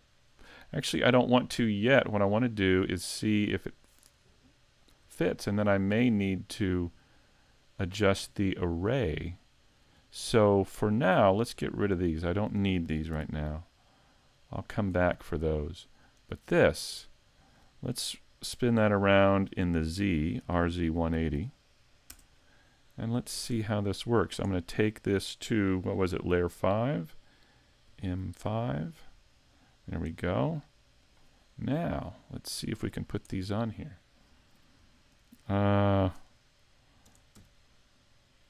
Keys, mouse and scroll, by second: 0.8-1.1 scroll down 3, 1.3 middle click, 3.0-3.5 scroll down 2, 3.5 middle click, 5.1 shift+middle click, 5.7-6.1 scroll up 2, 6.1 middle click, 8.9 scroll up 3, 9.4 shift+middle click, 10.7 right click, 12.0 shift+right click, 13.1 x, 16.2 right click, 16.8-19.4 scroll down 1, 19.4 scroll down 1, 20.0 r, 23.2-23.6 scroll down 3, 27.9 m, 31.0 click, 31.4-31.8 scroll down 4, 31.8 middle click, 33.3 shift+middle click, 35.0 shift+middle click, 36.1 KP_1, 37.1 KP_3, 37.4 KP_5.